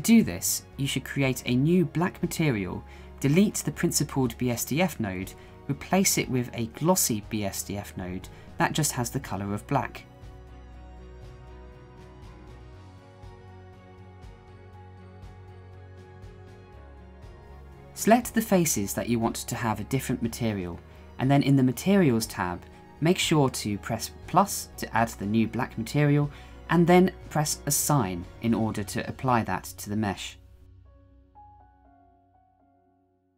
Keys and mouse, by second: 0.7 Delete, 2.0 shift+a.